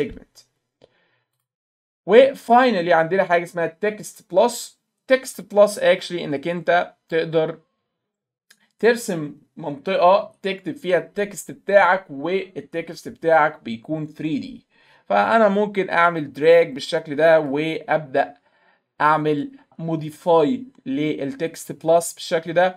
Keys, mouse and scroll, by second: 1.4 click, 5.4 click, 16.0-17.5 drag, 20.0 click.